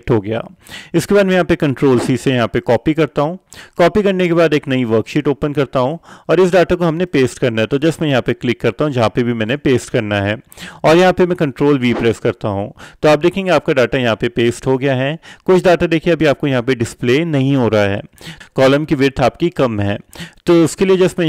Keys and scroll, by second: 2.1 ctrl+c, 12.1 ctrl+v.